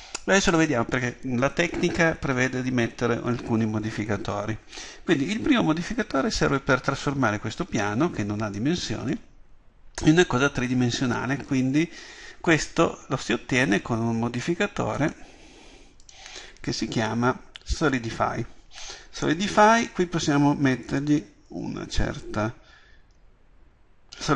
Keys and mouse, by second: 21.1-24.3 drag.